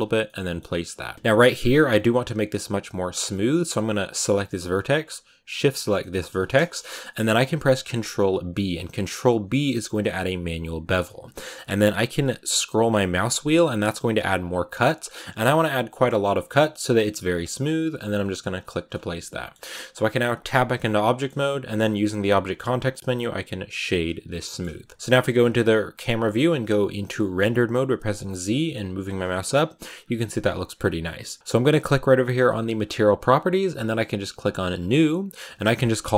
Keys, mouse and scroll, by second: 0.1 middle click, 0.7-1.0 scroll down 2, 1.0 middle click, 1.4-3.9 scroll up 4, 3.9-5.7 right drag, 5.7 scroll down 1, 5.9-7.8 middle drag, 7.8 ctrl+b, 18.8-20.3 middle drag, 20.3 Tab, 20.7 scroll up 1, 20.7-23.8 middle drag, 23.8 w, 24.2 middle click, 24.5-24.9 scroll up 1, 24.9 KP_0, 25.4 z, 26.2 scroll down 5, 26.9 click, 28.0 z, 28.6-29.9 scroll up 1, 29.9 scroll up 1, 31.4-34.6 shift+middle drag, 34.6 click, 35.3-36.1 drag.